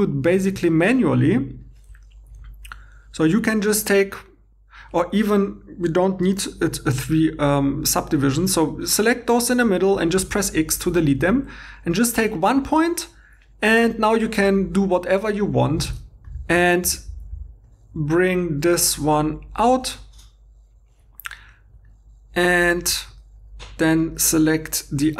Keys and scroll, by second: 9.6 x, 12.2 g, 15.9 alt+Tab.